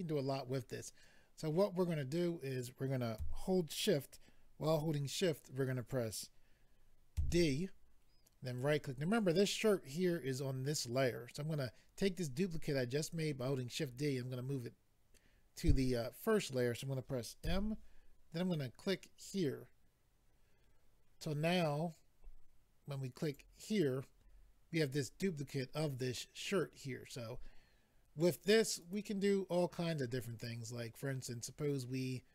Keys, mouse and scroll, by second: 8.4 right click, 19.2 click, 23.2 click, 23.3 click, 28.8 click, 28.9 click, 30.3 click, 30.4 click.